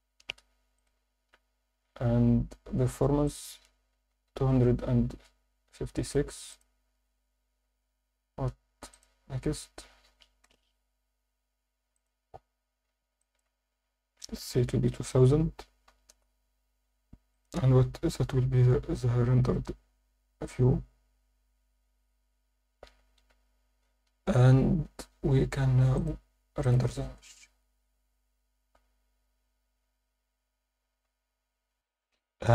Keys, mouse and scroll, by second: 0.7 click, 1.4 scroll down 1, 1.9 scroll down 4, 3.3-5.1 drag, 6.0 click, 6.5 click, 7.8 scroll up 1, 8.9 click, 8.9 scroll up 1, 10.4 KP_0, 11.9 click, 13.2-16.1 shift+drag, 14.7 0, 18.2 click, 25.9-32.5 drag.